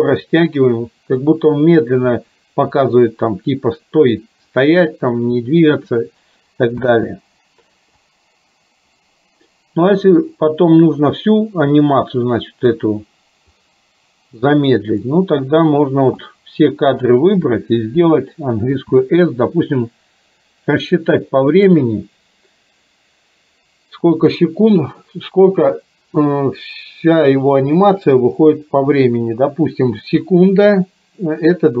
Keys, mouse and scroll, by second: 6.8 space, 8.0-12.8 drag, 13.7-15.2 drag, 16.3-17.3 drag.